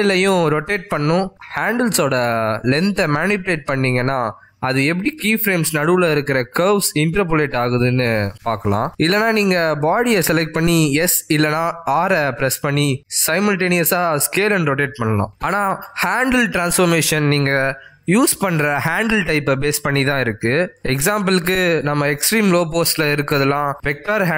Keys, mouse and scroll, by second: 0.3 g, 10.7 click, 11.2 r, 12.8 s, 18.6 click, 23.8 click.